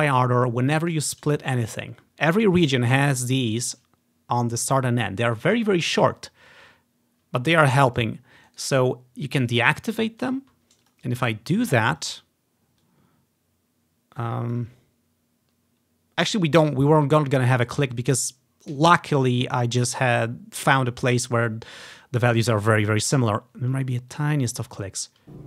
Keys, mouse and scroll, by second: 0.6 click, 1.7-3.3 drag, 8.5-9.5 right drag, 9.5-11.2 drag, 10.9 right click, 12.1 click, 12.9-14.6 drag, 17.0-18.5 scroll up 1, 20.7 click, 22.8-24.0 scroll down 1, 24.2-25.3 ctrl+drag.